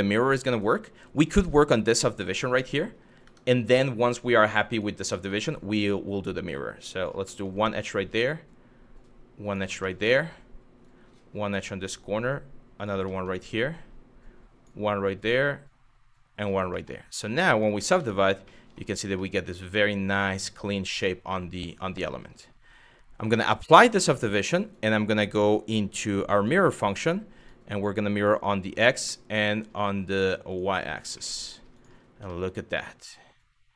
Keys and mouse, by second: 1.8 middle click, 2.8 Tab, 4.4 click, 4.7 middle click, 5.5 click, 6.9 middle click, 7.6 click, 9.5 middle click, 10.4 click, 11.5 click, 12.7 middle click, 13.3 click, 14.9 click, 16.3 middle click, 17.2 click, 17.6 Tab, 18.2 middle click, 18.9-21.5 middle drag, 22.8-23.6 drag, 24.3-26.1 drag, 27.0 click, 28.7-29.3 middle drag, 30.1 click, 30.3 click, 30.9-31.2 middle drag, 31.4 click, 32.0 shift+middle drag, 32.5-33.7 middle drag.